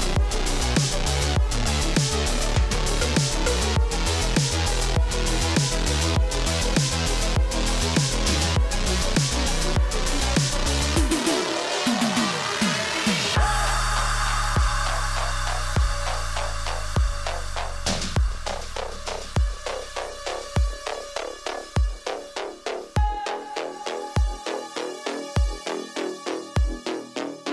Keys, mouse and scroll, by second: 0.8 click, 2.2 scroll down 1, 4.6 scroll, 5.4 alt+click, 5.6-7.7 typing, 7.2 scroll, 9.0 click, 9.2 space, 10.5 space, 10.7 space, 11.2 space, 11.7 space, 12.9 space, 13.8 click, 16.7 click, 17.8 click, 18.9 click, 20.0-21.4 typing, 23.0 Tab, 23.9 Tab, 24.1 Return, 26.2 click, 27.2 alt+click, 27.4-27.5 typing.